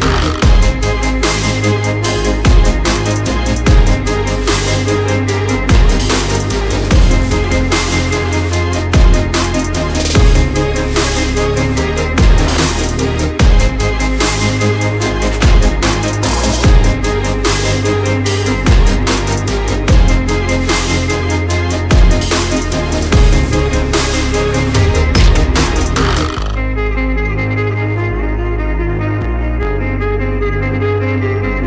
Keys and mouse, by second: 1.5 g, 5.0-5.5 middle drag, 5.7 shift+middle drag, 6.5 g, 8.1 s, 10.1 shift+middle click, 11.3 g, 16.2-17.2 drag, 16.2-17.2 middle drag, 16.2-17.2 right drag, 17.7 click, 17.7 middle click, 17.7 right click, 18.6 g, 22.2-23.5 middle drag, 24.8-25.6 shift+middle drag, 26.2 click, 28.1 Tab, 29.2 1, 30.2 click.